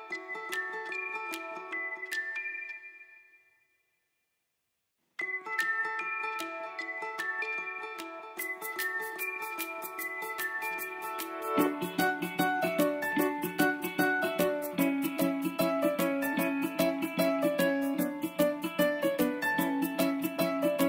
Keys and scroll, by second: 4.9 ctrl+j.